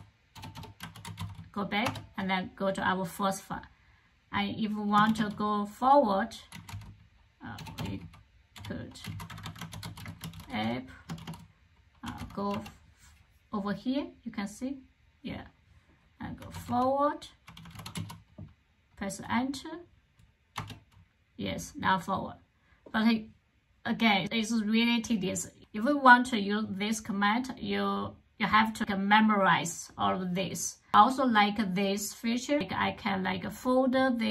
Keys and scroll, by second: 0.0-1.5 typing, 1.7 Return, 4.9 shift+;, 6.1-12.4 typing, 16.0-18.3 typing, 20.4 Return.